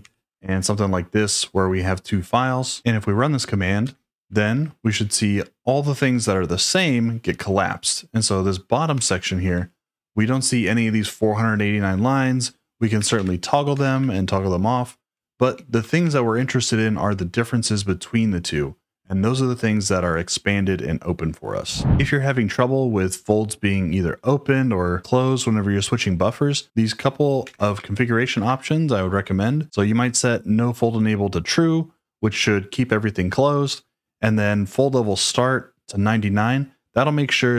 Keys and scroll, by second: 4.1 Return, 9.1 ctrl+d, 12.7-13.8 typing, 14.9-16.9 typing.